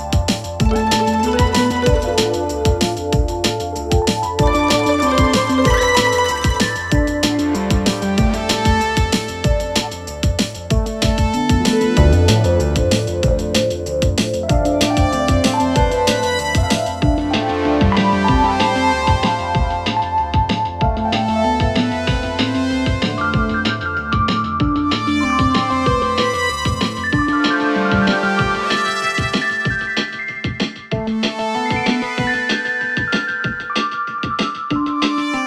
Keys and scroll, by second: 2.7 ], 3.7 4, 6.5 3, 9.9 ], 15.0 ], 17.4 ], 20.6 ctrl+z, 20.9 4, 22.0 e, 22.3 3, 24.9 4, 28.6 3.